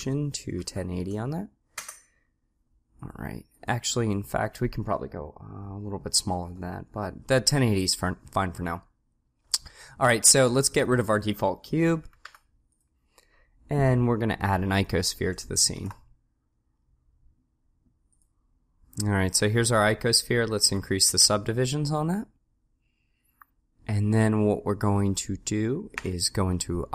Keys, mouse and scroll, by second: 3.0-6.0 drag, 10.9 click, 11.3 click, 12.3 Delete, 15.8 shift+a, 20.7 click, 26.0 Tab.